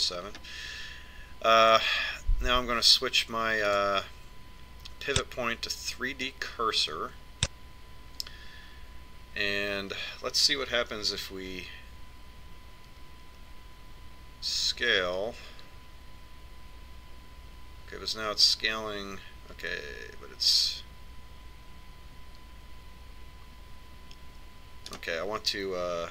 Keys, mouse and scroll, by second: 0.0 ctrl+KP_7, 1.6-3.7 middle drag, 5.0 click, 6.9 click, 16.1 s.